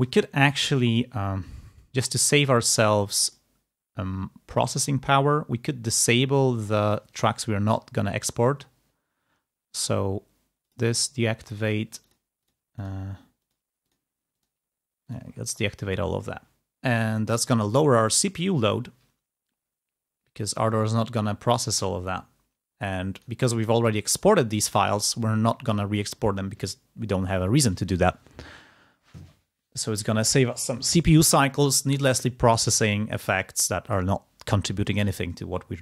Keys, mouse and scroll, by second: 0.9 click, 3.1 click, 4.5-5.7 drag, 10.6 click, 11.3 click, 12.0 click, 13.3-14.7 drag, 15.1 click, 23.0 click, 23.5-24.0 scroll up 2, 24.0-24.5 scroll down 2, 25.1 scroll up 2, 25.6 click, 33.7 click, 35.6 ctrl+scroll up 2.